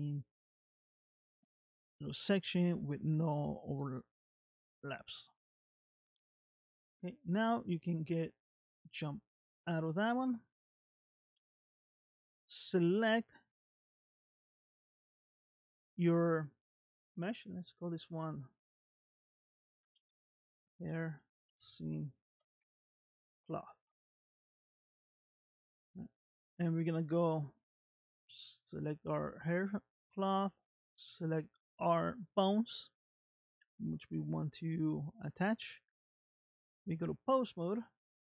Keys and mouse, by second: 1.7-3.2 middle drag, 3.8 middle click, 7.7 middle click, 8.7 Tab, 9.7 middle click, 14.4 click, 17.9 click, 18.1-25.0 drag, 27.5 click, 28.8 click, 29.8 click, 31.4 shift+click, 36.5 ctrl+Tab.